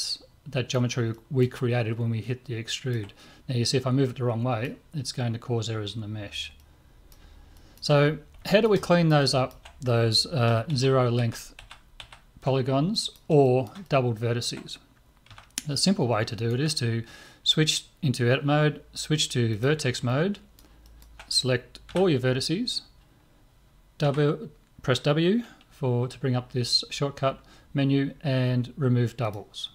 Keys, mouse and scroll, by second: 1.1-3.7 middle drag, 3.7-8.8 drag, 3.8 middle click, 7.5-11.1 middle drag, 10.7 ctrl+z, 11.2 ctrl+z, 11.8 ctrl+z, 12.0 ctrl+z, 12.9-17.4 middle drag, 15.3 a, 19.5-21.9 drag, 20.1-21.1 middle drag, 21.9 middle click, 21.9 a, 24.0 w.